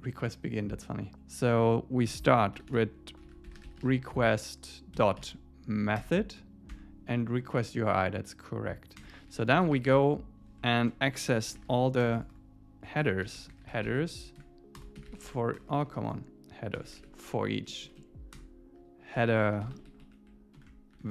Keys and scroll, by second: 2.6 alt+8, 2.7 alt+9, 3.1 Left, 3.7 Left, 6.0 Return, 6.7 Tab, 9.0 Return, 9.6 Tab, 10.8 shift+super+Left, 11.5 Tab, 17.7 Down, 18.3 Down, 18.3 Return, 19.7 Right, 20.6 shift+Left.